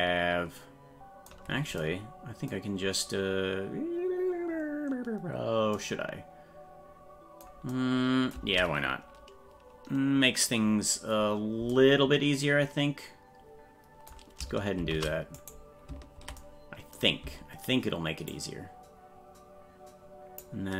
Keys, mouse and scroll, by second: 14.7 shift+d, 18.3-20.3 ctrl+drag.